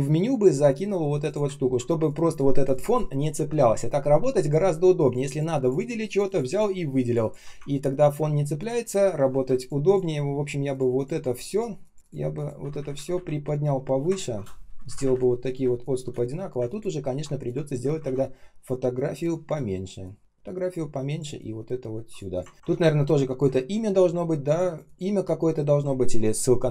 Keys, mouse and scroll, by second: 0.7 ctrl+shift+[, 1.5 ctrl+scroll up 1, 7.5 ctrl+scroll down 1, 9.5 shift+click, 9.8 shift+click, 11.9 shift+click, 12.3 shift+click, 12.5 shift+Up, 14.0-14.8 ctrl+scroll up 1, 14.8 Up, 14.9 Up, 15.5 space, 16.6 ctrl+click, 16.9-17.6 ctrl+scroll up 1, 17.9 ctrl+z, 19.9 shift+click, 22.5 ctrl+scroll down 1, 22.5 ctrl+scroll up 1, 22.6 r.